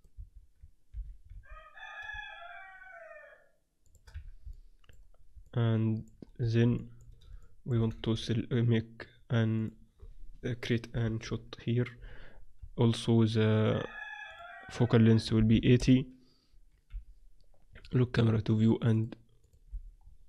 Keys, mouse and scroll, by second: 0.0 click, 0.2 z, 0.9 g, 1.2 middle click, 1.4 click, 4.2 z, 4.4 click, 5.4 middle click, 7.7-9.6 middle drag, 8.0 shift+a, 10.9 ctrl+alt+KP_0, 13.2-16.1 drag, 16.8 n, 18.6-20.2 drag, 19.6 n.